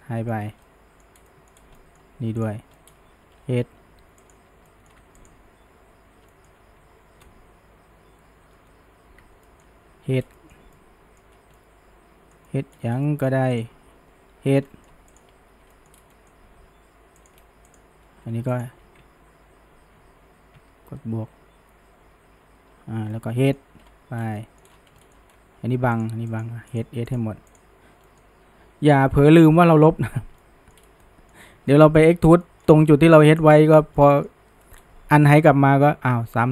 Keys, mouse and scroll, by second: 0.0-0.4 middle drag, 0.4 scroll up 1, 0.7 middle click, 1.2-1.8 scroll, 1.3 middle drag, 1.8-2.5 middle drag, 2.5 click, 2.8 middle click, 3.4 h, 4.3 click, 4.7-5.2 middle drag, 5.2 alt+shift+click, 6.3 middle click, 7.2 ctrl+KP_Add, 9.5 middle click, 10.0 h, 10.2 scroll down 1, 10.4-11.3 shift+middle drag, 11.3 scroll up 1, 11.6-12.9 middle drag, 12.9 scroll up 1, 13.1-13.6 middle drag, 13.6 click, 14.4 h, 14.7-15.2 middle drag, 15.2 click, 15.8 middle drag, 16.0 scroll down 1, 16.1-17.2 middle drag, 17.2 click, 17.7 alt+shift+click, 18.6 alt+shift+click, 20.9 ctrl+KP_Add, 23.1 middle click, 23.8 h, 24.4-24.7 middle drag, 24.7 scroll up 2, 25.0 shift+middle click, 26.0 drag, 26.3 shift+click, 26.8 shift+drag, 27.1 shift+drag, 27.5 shift+click, 28.1 middle click, 28.6 h, 29.0 scroll down 1, 29.3 middle click, 29.6-30.4 scroll up 1, 30.4-30.9 middle drag, 30.9 scroll, 31.0-31.4 middle drag, 31.4 scroll up 1, 31.7-33.4 shift+middle drag, 33.4 click, 33.7 scroll down 1, 34.0-34.8 middle drag, 34.8-35.3 scroll up 1, 35.3-36.5 shift+middle drag.